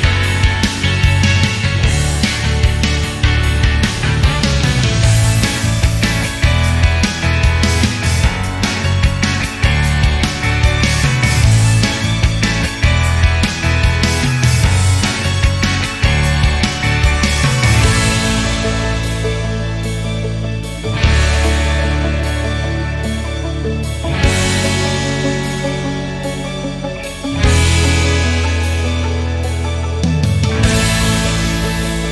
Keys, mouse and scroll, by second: 0.3 drag, 0.8 shift+click, 2.0-3.8 drag, 4.1-5.3 drag, 6.5 KP_7, 7.2-7.6 shift+middle drag, 7.6 scroll up 1, 8.0 click, 8.2 Tab, 9.3 alt+click, 11.2 alt+z, 11.8-13.1 shift+middle drag, 13.1 alt+click, 13.6 scroll down 1, 13.9-14.9 shift+middle drag, 14.9 click, 15.5 alt+z, 16.3 s, 20.2 alt+click, 20.8 s, 23.8 alt+click, 24.5 s, 27.0 Tab, 27.2 click, 27.4 scroll down 3, 28.0-29.8 middle drag, 30.2 middle click, 30.8 KP_7, 31.2 scroll up 1, 31.6 click.